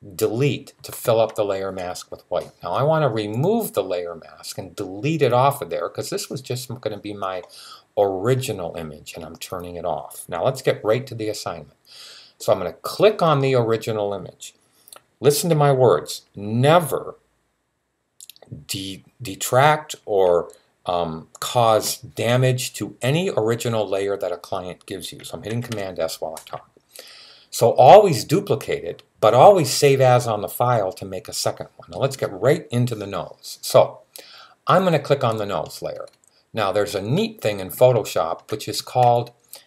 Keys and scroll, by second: 25.3 super+s.